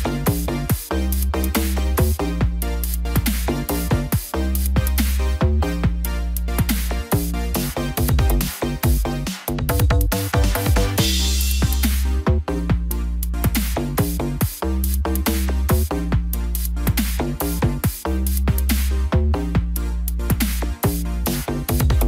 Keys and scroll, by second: 4.3 ctrl+t.